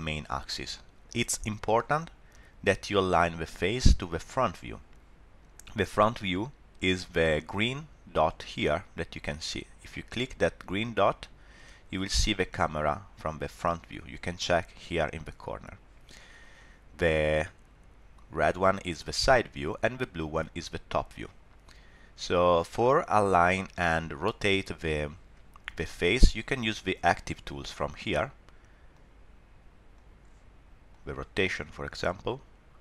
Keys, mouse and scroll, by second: 0.7 middle click, 11.0 click, 17.2 click, 20.2 click, 22.8 click, 27.7 click, 28.9 click, 29.9 click, 30.9 click, 32.0 click.